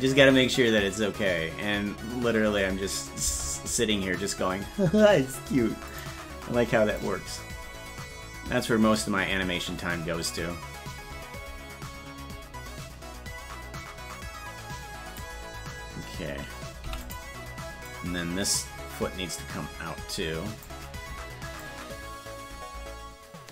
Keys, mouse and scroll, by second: 3.3 space, 5.9 click, 7.0-15.2 drag, 17.9-20.6 drag, 21.6-23.5 shift+drag.